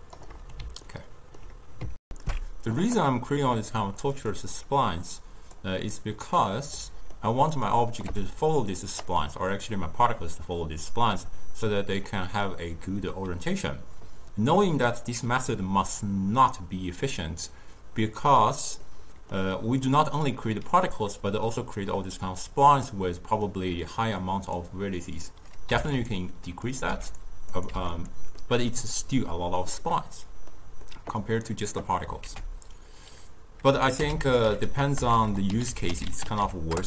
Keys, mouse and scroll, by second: 1.0-2.1 ctrl+middle drag, 2.1 alt+shift+q, 4.2 click, 4.7-6.0 drag, 6.0-7.7 middle drag, 7.7 click, 8.1 g, 9.3-13.8 middle drag, 18.9-19.9 middle drag, 19.9 click, 23.0-24.3 middle drag, 24.3 click, 25.2 click, 26.7 click, 27.6 click, 28.5-32.3 middle drag, 32.3 ctrl+a, 34.3 o, 35.2 BackSpace, 35.4 BackSpace, 35.8 l.